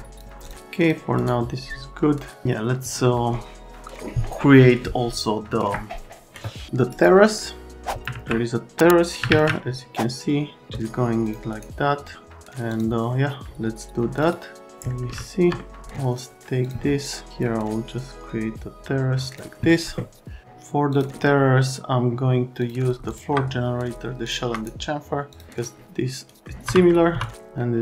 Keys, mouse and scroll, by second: 0.4 click, 0.8 click, 1.2 right click, 6.9 right click, 11.2 click, 11.5 right click, 12.7 click, 14.2 click, 15.2 alt+middle click, 16.6 click, 17.3 click, 20.9 click, 22.6 click, 23.1 click, 24.2 click, 25.3 click, 25.5 click, 26.4 right click, 26.6 F3, 27.1 F3.